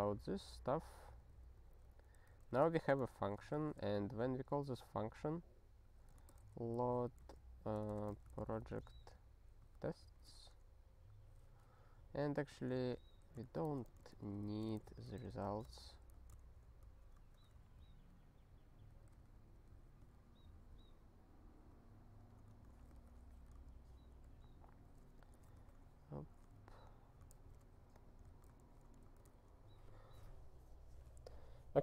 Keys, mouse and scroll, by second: 0.2 ctrl+p, 0.7 ctrl+p, 1.2 ctrl+n, 1.4 ctrl+n, 1.7 ctrl+n, 1.9 ctrl+n, 2.4 ctrl+e, 3.2 Return, 3.5 (, 5.8-9.1 typing, 9.8 Return, 10.0 ctrl+e, 12.5 click, 12.6 click, 13.0 ctrl+n, 13.4 alt+b, 13.6-15.6 typing, 16.1 Return, 16.4 ctrl+alt+@, 17.2 Tab, 17.7-18.8 ctrl+n, 19.0 ctrl+n, 19.3 ctrl+e, 19.6 ctrl+p, 20.0 ctrl+b, 21.7 ctrl+e, 22.2 ctrl+=, 22.5 Tab, 23.0 ctrl+s, 23.7 ctrl+n, 24.3 ctrl+p, 25.2 click, 25.6 ctrl+alt+x, 26.5 ctrl+n, 27.3 ctrl+alt+f, 27.9 click, 28.6 ctrl+alt+f, 29.3 ctrl+e.